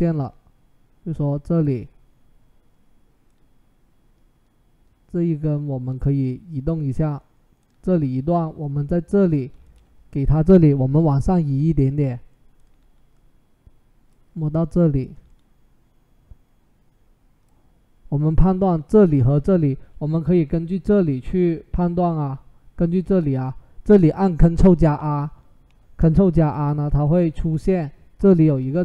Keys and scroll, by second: 10.4 Up, 10.6 Up, 10.8 Up, 11.3 Down, 24.6 ctrl+t, 26.4 Escape, 27.1 ctrl+r, 28.2 ctrl+r.